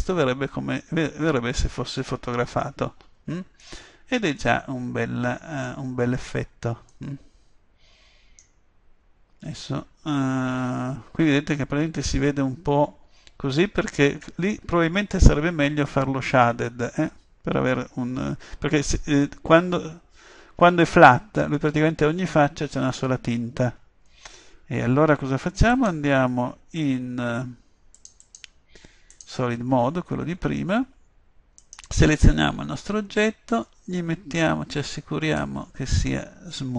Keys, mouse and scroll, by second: 25.8 click, 27.8 click, 28.3 click, 29.0-30.3 drag, 31.7-33.5 drag, 35.4-36.7 drag.